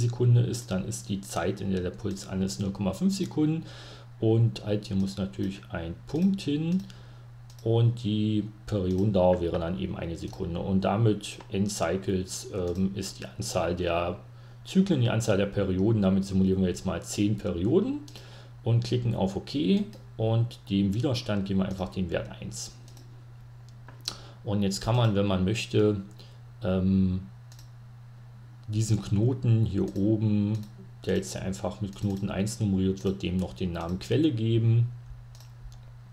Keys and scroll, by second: 0.0-2.4 typing, 4.0 ^, 5.6-6.9 typing, 8.0-9.6 typing, 10.8-12.5 typing, 21.2-22.5 typing, 29.7-33.2 typing.